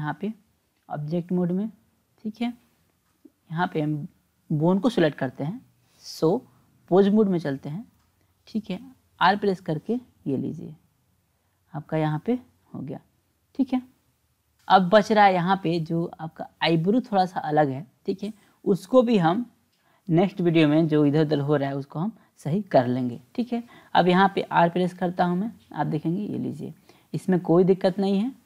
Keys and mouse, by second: 3.2 click, 3.9 click, 6.0-7.2 drag, 9.2 r, 23.4 click, 25.6 r.